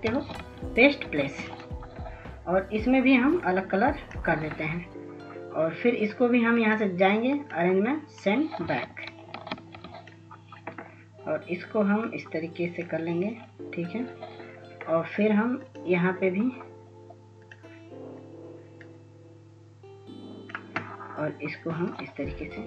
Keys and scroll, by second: 0.2 ctrl+s, 0.7 ctrl+s, 1.1 ctrl+s, 8.4 ctrl+s, 8.8 ctrl+s.